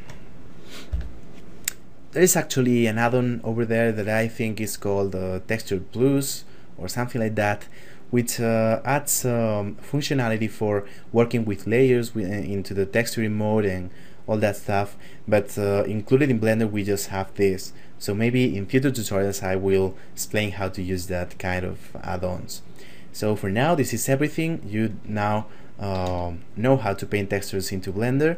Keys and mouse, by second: 0.6 F9, 25.0 ctrl+middle click, 26.0 shift+middle click.